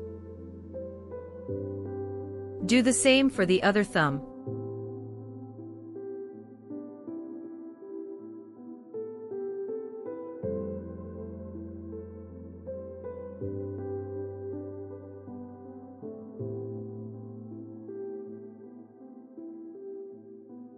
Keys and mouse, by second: 0.0-0.9 shift+middle drag, 1.8 click, 2.8 KP_Decimal, 3.6 middle click, 3.7 middle click, 4.5-6.9 middle drag, 7.5 r, 8.8 click, 9.5-10.3 middle drag, 12.3 i, 20.2 right click.